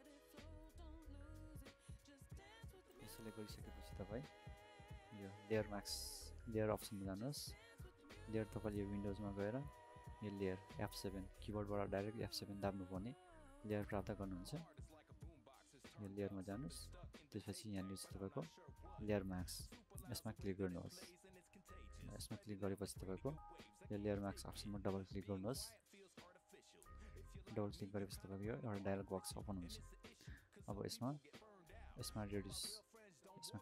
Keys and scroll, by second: 2.6-3.3 typing.